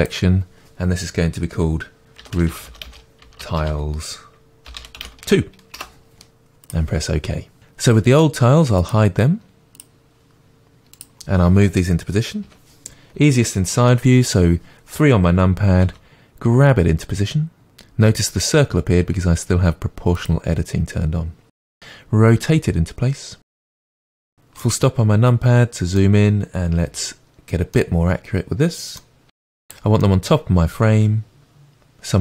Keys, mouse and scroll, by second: 5.7 BackSpace, 8.8-11.0 drag, 12.4 KP_3, 15.9 g, 20.2-21.8 drag, 21.8 r, 23.8 KP_Decimal, 24.6-32.2 middle drag, 26.8 g, 29.1 g.